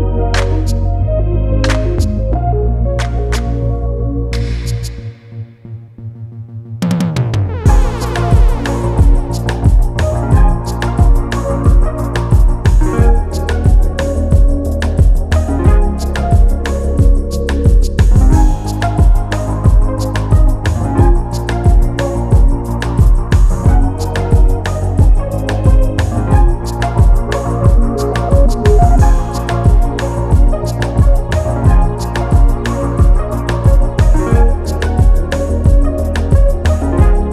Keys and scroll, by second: 15.5 ctrl+t, 18.3 Return, 23.4 ctrl+t, 28.4 Return, 36.2 e.